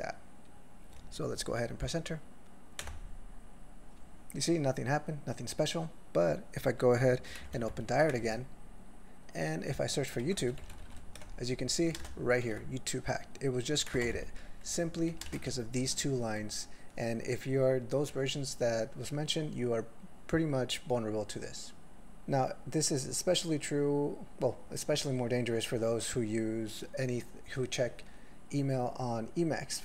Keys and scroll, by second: 2.9 Return, 7.6 ctrl+f, 10.2 ctrl+s, 10.5-10.8 typing, 11.2 ctrl+s, 12.0 ctrl+space, 12.0 ctrl+e, 12.4 ctrl+g, 14.8 ctrl+a, 15.1 ctrl+p, 15.2 ctrl+space, 15.3 ctrl+e, 15.4 ctrl+n, 15.8 ctrl+g.